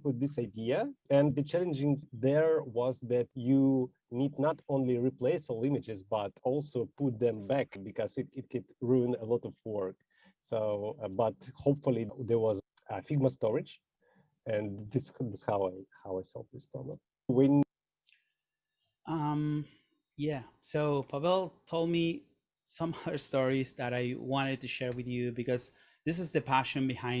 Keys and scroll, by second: 23.7 super+/, 25.0 Return.